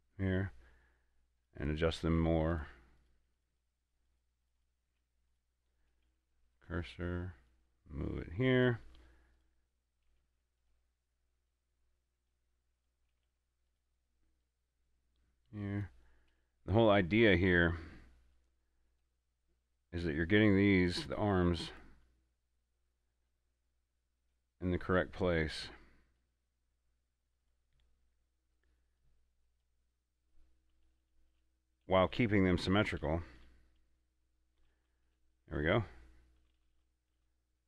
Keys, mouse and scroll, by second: 1.7 right click, 2.5 Tab, 2.8 right click, 3.3 right click, 4.1 right click, 4.8 right click, 5.2 Tab, 5.6 right click, 6.3 shift+s, 6.8-9.6 drag, 8.1 click, 9.6 right click, 10.5 shift+s, 10.9-13.1 drag, 13.1 right click, 13.5 shift+s, 14.0-16.6 drag, 16.6 a, 17.1 right click, 18.6-20.2 drag, 20.2 right click, 23.6-27.7 drag, 27.7 right click, 29.3-32.6 drag.